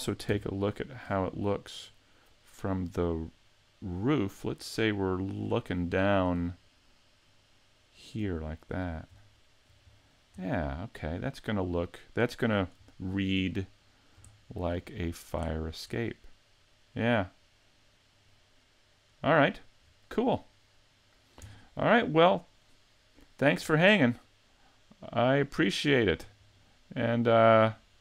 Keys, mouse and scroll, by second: 0.2 shift+c, 0.7 scroll down 2, 1.0-1.8 scroll up 9, 1.8 middle click, 5.9 shift+middle click, 6.4-6.8 scroll up 3, 6.8 middle click, 8.4 shift+middle click, 8.8-9.2 scroll up 2, 9.3 shift+middle click, 9.8 scroll down 1, 10.4 middle click, 12.9 shift+middle click, 13.6 middle click, 14.3 shift+middle click, 14.9 middle click, 15.5 shift+middle click, 16.0 middle click, 19.5 middle click, 19.8-20.4 scroll down 3, 20.3-21.0 scroll up 3, 21.0 middle click, 21.4-21.9 scroll down 2, 21.9 middle click, 23.7 middle click, 25.7 shift+middle click, 25.9 shift+middle click, 26.2-26.6 scroll down 3, 26.6 middle click.